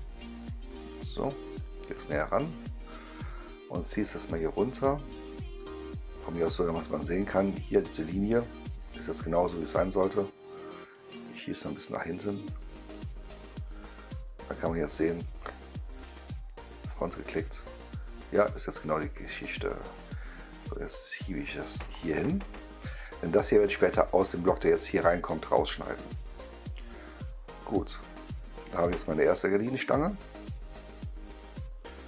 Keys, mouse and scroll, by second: 0.5-2.6 middle drag, 3.6-5.5 drag, 6.1-7.4 drag, 9.6-10.4 right drag, 11.6-13.3 drag, 13.7-15.9 right drag, 16.8 click, 19.6-21.8 drag, 26.6 middle click, 27.6-28.9 right drag, 29.1 middle click, 29.6-32.0 right drag.